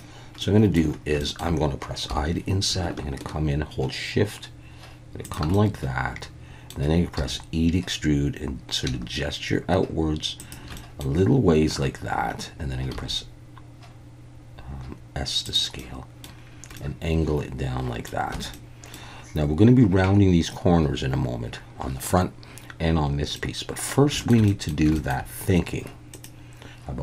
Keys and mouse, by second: 0.4 middle click, 1.2 shift+middle click, 5.2 shift+click, 5.5-6.7 middle drag, 7.2 e, 10.4 shift+click, 10.8 middle click, 12.9 s, 15.4 click, 15.8 middle click, 16.7-18.1 middle drag, 18.3 Tab, 18.5-18.9 middle drag, 23.3-23.9 middle drag, 24.2 shift+middle click, 24.5 middle drag, 24.9 shift+middle drag.